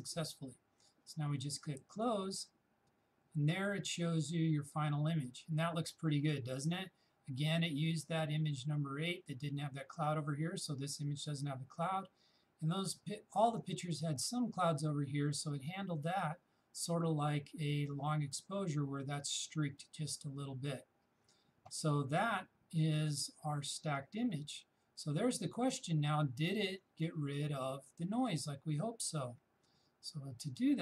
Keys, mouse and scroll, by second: 2.0 shift+click.